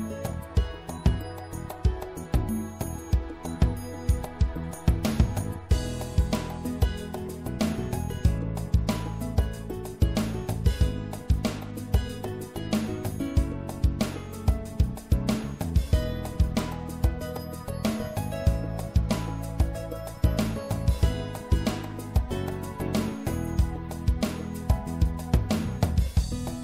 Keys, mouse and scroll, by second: 2.3-3.5 middle drag, 6.0 middle click, 6.5 right click, 7.0 middle click, 7.2 middle click, 10.4 click, 12.3-13.8 middle drag, 13.8-16.6 drag, 17.0-19.4 middle drag, 19.4-22.2 drag, 22.2 middle click, 25.4 middle click.